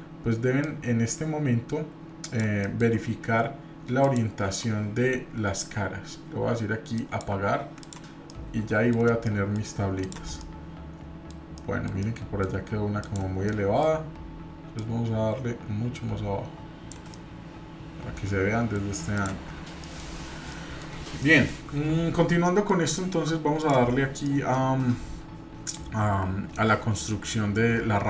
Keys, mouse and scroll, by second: 0.6-2.4 drag, 2.6 middle click, 4.0-7.5 drag, 7.8 click, 8.3-8.9 middle drag, 8.9 scroll down 1, 9.2-9.6 middle drag, 10.0 click, 10.4-11.3 middle drag, 11.6-11.9 middle drag, 12.0-12.4 middle drag, 13.0 click, 13.5-14.0 middle drag, 14.8-16.9 drag, 17.1-18.7 middle drag, 19.1 click, 19.5-20.0 scroll down 2, 19.8 middle drag, 20.1-20.5 scroll up 2, 20.5-20.8 middle drag, 21.2-21.6 shift+middle drag, 22.4 middle drag, 22.9 shift+middle drag, 23.6 click, 24.2 middle click.